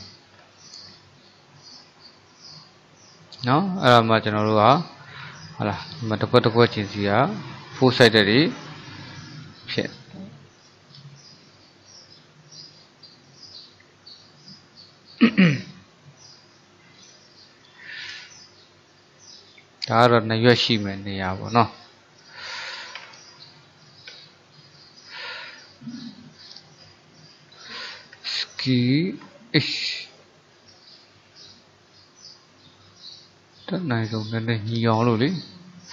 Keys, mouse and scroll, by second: 0.4-0.8 scroll down 4, 0.8-3.6 middle drag, 3.6-4.1 scroll up 3, 4.1-5.1 shift+middle drag, 5.1 click, 5.7 click, 6.2 click, 6.9 click, 7.4 click, 7.9 click, 8.3 click, 8.6 click, 9.1 click, 9.5 click, 9.9 click, 10.4 click, 10.7 click, 12.8 click, 13.8 alt+click, 14.3-22.9 middle drag, 23.0 ctrl+KP_3, 24.2 KP_1, 26.1 click, 28.2 s.